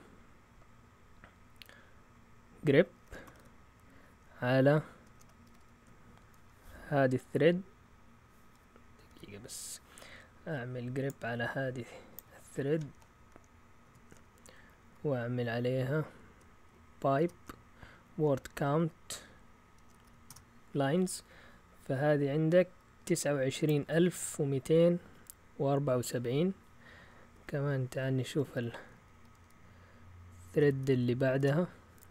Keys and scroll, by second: 3.0-3.8 typing, 5.0-5.5 typing, 13.8 ctrl+shift+Insert, 14.6 Right, 14.9 Right, 17.2-18.5 typing, 19.6-20.5 typing, 28.4 Left, 28.6 Left, 28.7 Left, 29.0 Left, 29.1-30.0 Left, 29.5-30.7 typing.